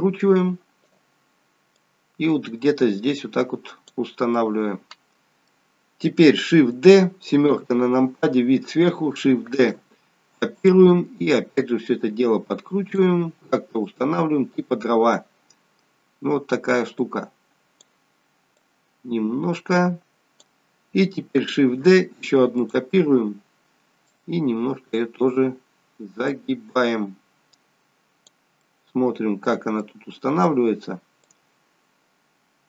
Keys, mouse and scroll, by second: 1.7 click, 4.3 middle click, 9.6 shift+d, 11.5 click, 13.8 click, 15.0 middle click, 18.5 click, 24.0 click, 26.4 click, 28.7 middle click, 29.8 middle click, 31.5 click.